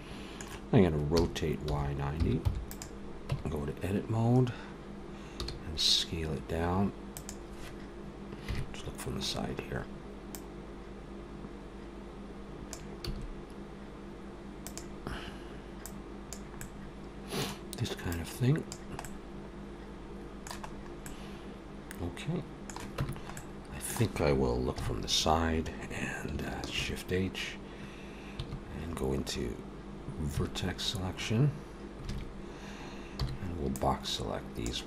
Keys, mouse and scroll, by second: 0.9 r, 3.1 Tab, 5.2 s, 8.7 KP_3, 9.1-9.7 scroll up 3, 10.1 click, 12.9 s, 16.2 click, 16.4 middle click, 17.9 click, 18.8 middle click, 20.4-21.3 scroll up 3, 20.9 middle click, 22.8 Tab, 23.2 middle click, 24.6 KP_3, 26.5 shift+h, 28.2 Tab, 30.2 1, 31.9 alt+a, 32.6-33.0 scroll up 1, 33.0 b.